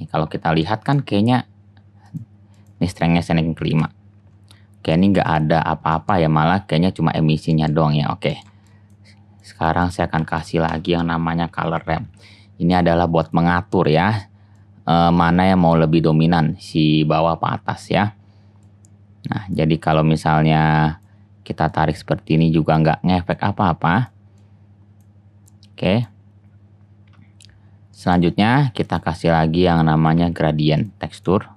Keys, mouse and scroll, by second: 2.3 click, 2.6 click, 7.6 click, 8.8-10.0 drag, 10.2 shift+a, 13.7-18.5 drag, 28.5 shift+a, 31.4-31.5 drag.